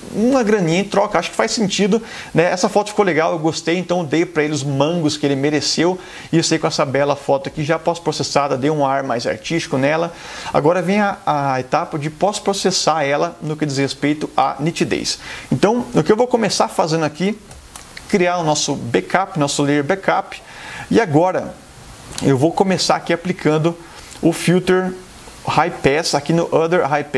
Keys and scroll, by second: 17.6 super+j.